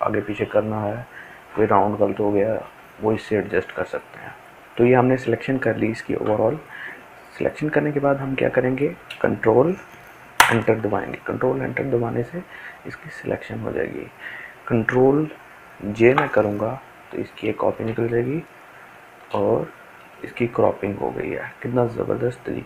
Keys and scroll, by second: 10.4 ctrl+Return, 15.9 ctrl+j.